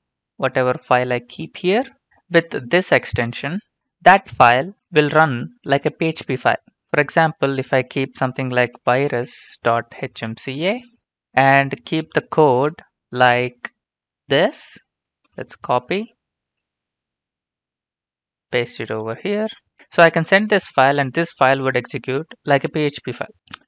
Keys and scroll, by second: 8.4-11.0 typing, 12.9 typing, 19.4 ctrl+v.